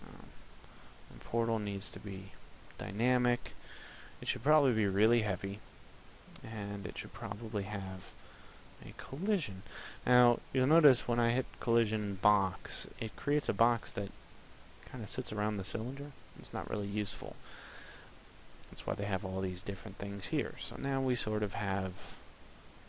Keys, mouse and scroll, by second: 1.0 click, 6.3 click, 18.6 click.